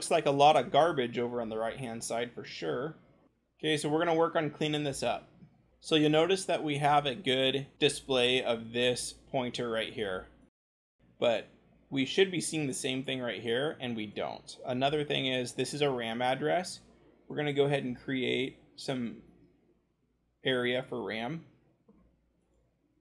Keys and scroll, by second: 2.7-4.1 scroll, 22.3 c.